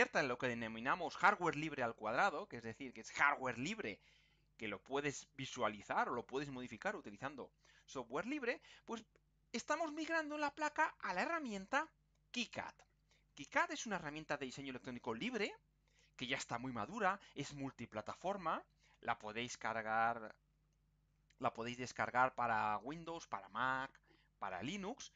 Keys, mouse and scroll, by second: 11.7 click.